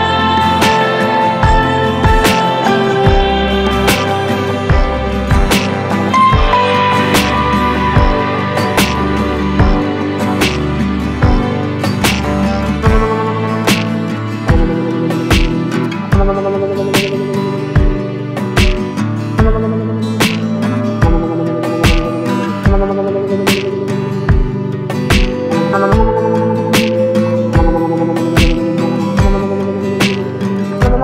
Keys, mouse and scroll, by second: 0.3-9.8 drag, 9.8-22.8 drag, 22.8-31.0 drag.